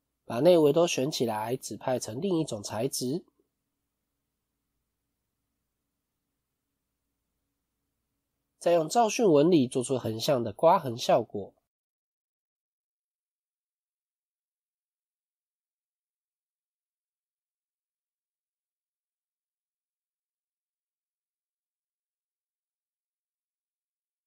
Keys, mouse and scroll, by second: 4.9 click.